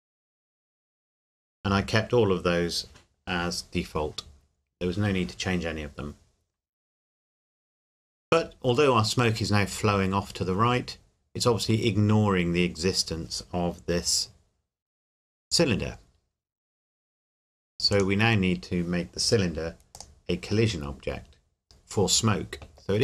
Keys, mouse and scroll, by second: 17.9 click.